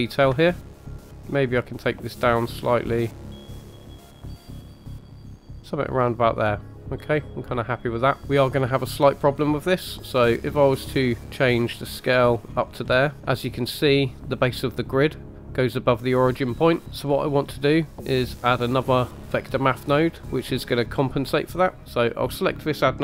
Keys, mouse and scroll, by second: 0.5 shift+middle drag, 1.0 scroll up 2, 1.2-3.1 drag, 3.4 click, 3.7 click, 4.3 click, 4.6-5.6 drag, 5.6 middle click, 8.2 scroll up 1, 10.5-12.4 drag, 12.8-13.2 scroll down 2, 13.6 middle drag, 21.8 click.